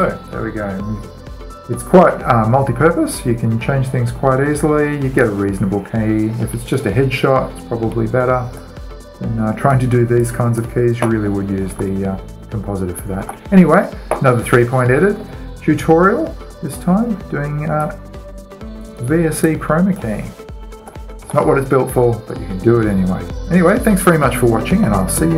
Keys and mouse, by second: 5.8-7.6 drag, 9.3-12.4 drag, 12.4 alt+a, 13.8 alt+a, 16.2 middle click, 16.3 middle click, 17.1 middle click, 17.3 middle drag, 17.4-18.4 middle drag, 18.4-20.2 right drag, 19.5-22.4 drag, 21.4 alt+a, 21.9 alt+a, 25.2 alt+a.